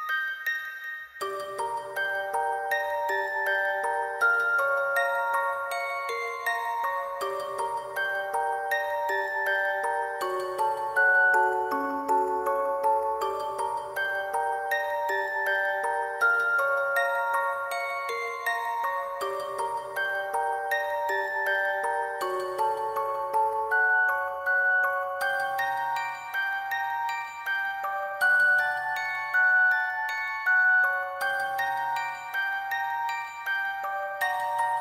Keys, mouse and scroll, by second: 0.6 shift+click, 1.8 shift+click, 2.8 double click, 3.3 double click, 4.0 double click, 4.6 double click, 5.0 ], 5.3 double click, 5.4 ctrl+click, 6.0 double click, 6.4 double click, 6.6 shift+click, 7.0 shift+click, 7.4 shift+click, 7.8 double click, 8.3 double click, 9.3 alt+click, 10.2 double click, 10.7 ctrl+click, 10.9 shift+click, 11.5 shift+click, 12.3 [, 12.4 ], 12.8 double click, 13.0 double click, 13.7 shift+click, 15.2 alt+click, 16.2 shift+click, 17.8 double click, 18.0 shift+click, 18.7 alt+click, 18.9 alt+click, 19.0 alt+click, 19.4 double click, 20.5 double click, 21.1 double click, 21.7 shift+click, 22.9 double click, 23.0 shift+click, 24.0 alt+click, 24.8 alt+click, 24.9 shift+click, 25.3 ctrl+click, 25.3 shift+click, 26.2 ctrl+click, 26.3 shift+click, 26.8 double click, 27.8 ctrl+click, 27.9 shift+click, 28.6 alt+click, 28.8 double click, 29.1 double click, 30.4 double click, 30.4 alt+click, 30.7 double click, 31.0 ctrl+click, 31.1 shift+click, 31.5 alt+click, 31.7 shift+click, 31.8 alt+click, 32.0 alt+click, 32.2 alt+click, 33.1 double click, 33.8 ctrl+click, 34.3 double click, 34.7 ctrl+click.